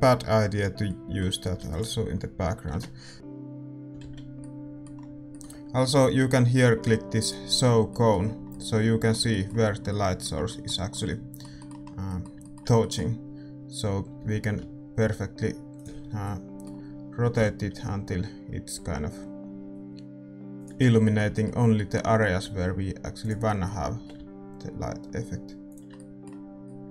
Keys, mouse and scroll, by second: 2.7 ctrl+s, 2.7 KP_0, 3.1 click, 4.1 shift+z, 4.3-7.2 middle drag, 7.2-9.5 drag, 7.8-26.9 middle drag, 14.4 r, 25.9 g.